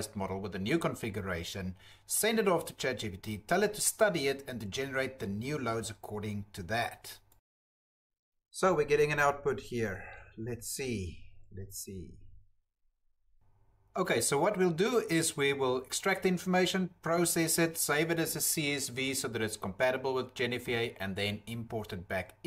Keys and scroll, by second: 0.0-1.6 typing, 0.3 Tab, 0.5 ctrl+v, 2.4 ctrl+c, 2.6 Tab, 2.7 ctrl+v, 2.8 Return, 14.1 Tab, 15.8 alt+Tab, 19.4 ctrl+v, 19.7 Delete, 20.0 Delete, 20.3 Delete, 20.8 Delete, 21.1 alt+Tab, 22.3 Tab, 22.4 ctrl+f.